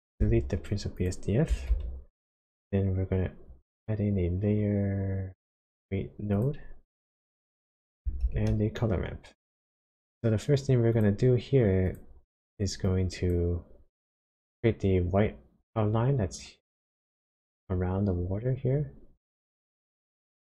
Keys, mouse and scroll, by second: 0.3 x, 0.9 click, 1.7 shift+a, 8.2 shift+a, 12.3 click, 12.8 click, 20.0 click.